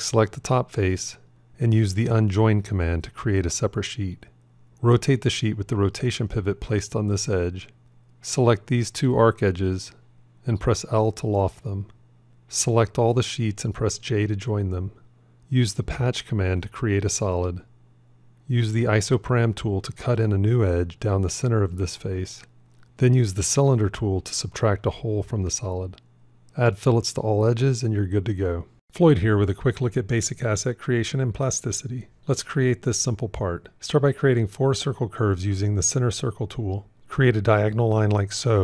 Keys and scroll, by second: 5.0 r, 5.0 v, 9.9 l, 14.2 j, 19.4 ctrl+r, 34.1 shift+c, 37.0 shift+a, 38.4 alt+x.